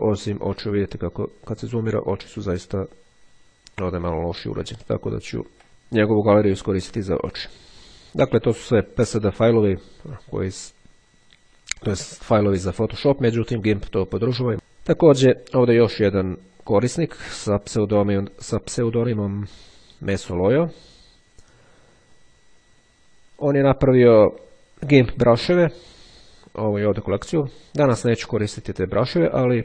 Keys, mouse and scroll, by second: 1.2-1.7 ctrl+scroll up 2, 4.6-5.3 ctrl+scroll down 2, 5.3-5.7 ctrl+scroll down 1, 14.5 click, 15.7-17.2 scroll up 2, 22.5-23.4 scroll down 2, 24.2-24.8 scroll down 2.